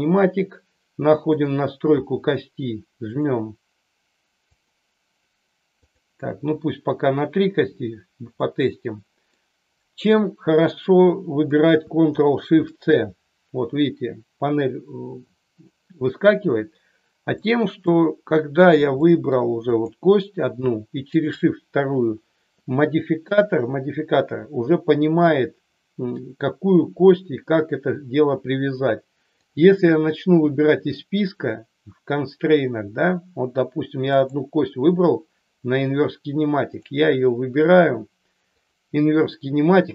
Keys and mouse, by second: 4.4 click, 8.4-9.3 middle drag, 17.4 middle click, 19.0 middle click, 19.6 click, 21.2 shift+click, 29.3-33.3 drag, 34.2 click, 36.8-38.7 drag.